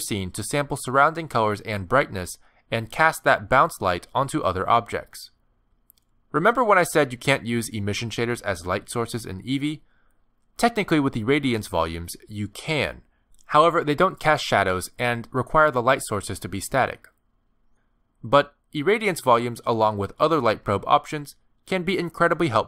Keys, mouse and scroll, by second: 0.2 s, 0.7-1.2 scroll up 3, 0.8 middle click, 1.4 click, 1.8 click, 2.4 middle click, 2.6 scroll up 1, 2.9 click, 3.1 g, 4.1 middle click, 5.3 middle click, 5.6 shift+middle click, 5.9 scroll down 1, 6.6 shift+a, 7.6 g, 8.0 ctrl+2, 8.2 middle click, 8.3 right click, 8.5 middle click, 8.7 g, 9.0 middle click, 9.3 g, 9.8 click, 10.3 click, 11.2 click, 11.8 click, 13.1 click, 14.2 click, 14.8 click, 15.3 middle click, 16.1 middle click, 16.9 shift+middle click, 17.4 click, 17.6 middle click.